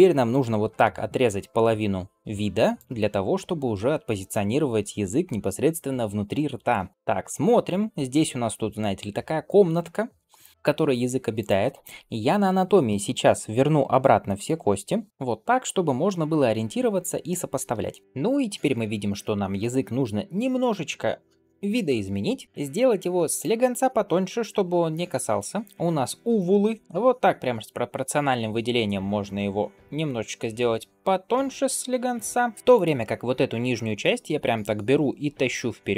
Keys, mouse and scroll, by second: 0.6 alt+b, 17.1 shift+middle drag, 18.0 shift+middle drag, 18.0 click, 18.6-20.0 drag, 22.4 Tab, 22.8 click, 32.5 g, 33.2 g.